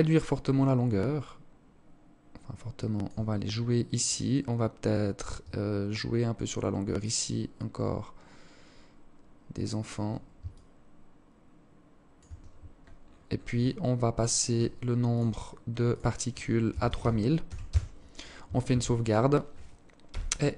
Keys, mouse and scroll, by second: 2.5 scroll down 2, 3.1 scroll down 7, 3.2 scroll up 1, 5.0 shift+click, 9.6 shift+click, 12.1 scroll up 1, 12.7 scroll up 10, 13.2 click, 14.2 click, 15.0 click, 17.7 ctrl+s.